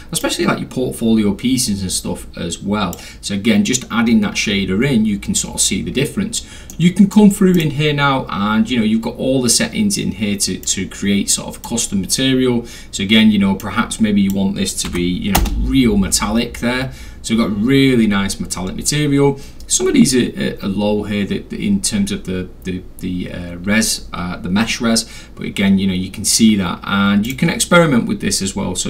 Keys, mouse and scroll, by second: 0.2-2.9 drag, 6.7 middle click, 7.6 click, 10.6-11.6 drag, 13.6 click, 14.9 1, 15.4 Return, 27.3 click.